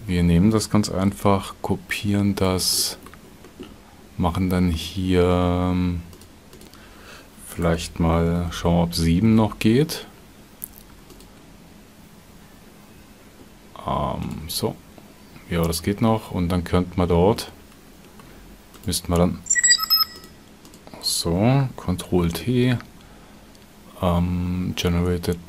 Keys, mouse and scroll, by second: 1.1 shift+d, 2.8-3.1 drag, 11.1 ctrl+shift+click, 14.2 ctrl+shift+click, 22.2 ctrl+t.